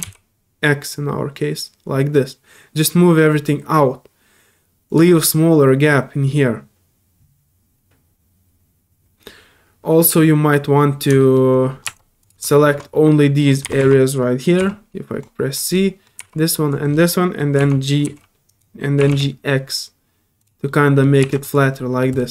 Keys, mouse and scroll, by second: 4.9 click, 5.1-10.1 middle drag, 10.1 middle click, 11.2 shift+middle click, 12.2 click, 12.5 shift+Tab, 12.5 middle click, 12.9 middle click, 14.8 scroll up 1, 15.2 click, 15.5 right click, 15.7 middle click, 16.3 click, 16.7 right click, 16.9 middle click, 17.1 middle click, 17.3 c, 18.5 right click, 20.4 click, 20.6-21.4 middle drag, 20.7 g, 21.4 click, 21.7 middle drag, 22.1 click.